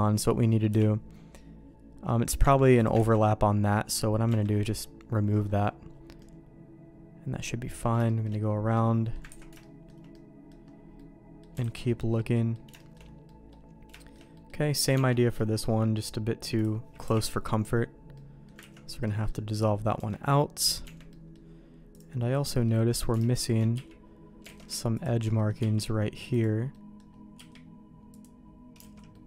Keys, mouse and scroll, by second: 0.1 click, 0.6 KP_Decimal, 2.4 Tab, 2.7 click, 2.9 ctrl+x, 3.1 middle click, 4.2 Tab, 4.6 middle click, 5.3 middle click, 6.1-7.8 middle drag, 8.0 shift+click, 8.7 middle click, 9.3 ctrl+s, 9.5 shift+middle click, 10.1 middle click, 10.9 middle click, 11.6 alt+a, 11.8 middle click, 12.3 middle click, 12.7 shift+middle click, 13.2 middle click, 13.9 shift+middle click, 14.3 middle click, 14.7 click, 14.9 Tab, 16.5 click, 17.0 KP_Decimal, 18.1 middle click, 18.7 ctrl+x, 19.0 middle click, 19.6 middle click, 19.9 Tab, 20.5 middle click, 20.9 Tab, 21.0 middle click, 21.9 click, 22.1 middle click, 23.3 alt+shift+click, 23.7 q, 24.4 alt+a, 25.3 middle click, 25.5 q, 26.7 middle click, 27.3 q, 28.8 alt+a, 29.1 middle click.